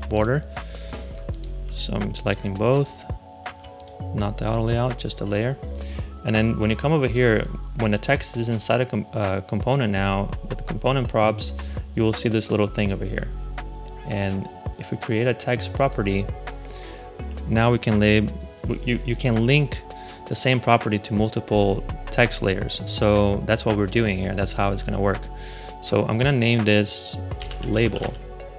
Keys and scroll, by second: 27.1-28.5 typing.